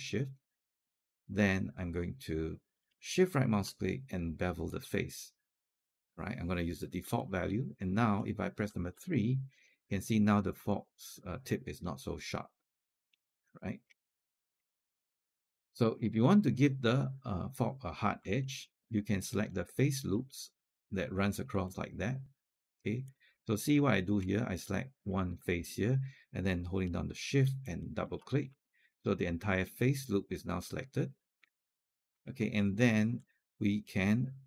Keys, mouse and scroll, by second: 3.1-5.9 shift+right drag, 7.0 click, 8.7 3, 9.4 click, 10.5 alt+click, 11.4 alt+click, 13.1 alt+click, 13.9 scroll up 1, 14.1 alt+click, 14.6 alt+scroll up 1, 14.9 alt+middle click, 15.3 scroll down 1, 15.6 alt+click, 15.9-16.3 scroll up 1, 18.3 alt+middle click, 19.3 click, 20.1 shift+click, 21.3 scroll down 1, 21.4 alt+click, 23.1 click, 23.6-24.0 alt+scroll up 2, 24.8 click, 27.4 shift+click, 27.7 shift+click, 28.2 scroll down 1, 28.4-31.9 alt+drag, 32.1-32.7 scroll up 2.